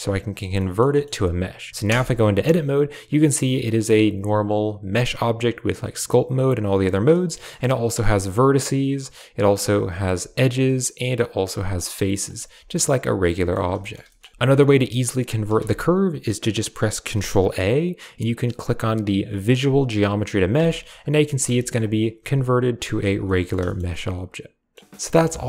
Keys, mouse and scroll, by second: 0.4 drag, 0.9 drag, 1.7 Tab, 2.0 middle click, 3.2-6.7 drag, 7.2 shift+middle click, 7.3 click, 7.6 right click, 7.9 g, 9.4 click, 9.9 right click, 10.0 g, 11.0 click, 11.5 right click, 11.6 g, 12.4 Tab, 12.6-13.4 drag, 13.7 shift+drag, 13.9 click, 14.3 ctrl+z, 14.3 Tab, 14.5 g, 15.4 Tab, 17.0 ctrl+a, 20.4 Tab, 20.8 right click, 21.0 g, 21.4 a, 21.8 click, 22.0 g, 22.9 Tab, 23.1 drag, 23.5 shift+drag, 23.8-24.6 drag.